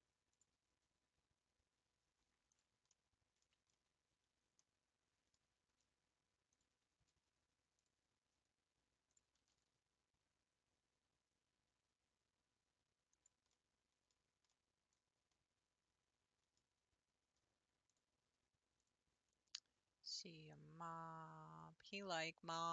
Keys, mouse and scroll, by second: 2.5 click, 3.0 middle click, 3.5 Tab, 3.7-5.6 middle drag, 5.6 Tab, 5.9 scroll up 1, 6.5 click, 7.8 click, 9.1 shift+click, 9.4 g, 13.6 middle click, 14.1-14.6 scroll down 2, 14.6-17.9 middle drag, 17.9 click, 18.8 click, 19.3 scroll up 4, 20.5 click, 22.4-22.7 scroll up 3.